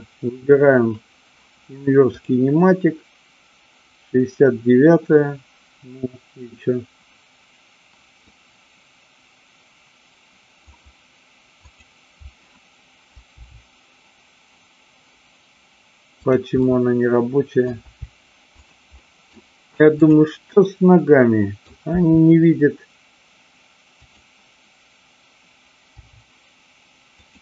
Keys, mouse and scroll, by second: 8.2-10.6 middle drag, 11.6-12.6 drag, 13.5 g, 16.2 click, 16.6-17.6 middle drag, 17.7 g, 19.0-19.4 middle drag, 20.0-21.0 drag, 21.0-21.5 middle drag, 21.8 r, 24.1 click, 25.8 g, 27.2 click.